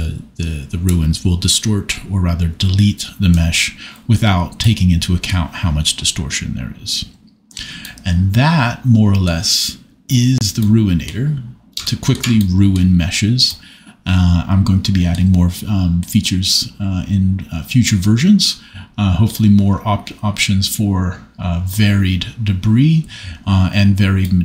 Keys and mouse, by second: 7.8 middle click.